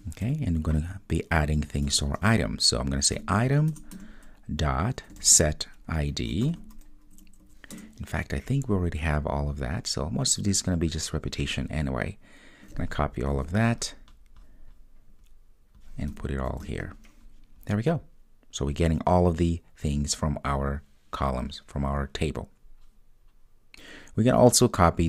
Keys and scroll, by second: 3.8 Return, 7.8 Return, 13.4 super+c, 17.6 super+v.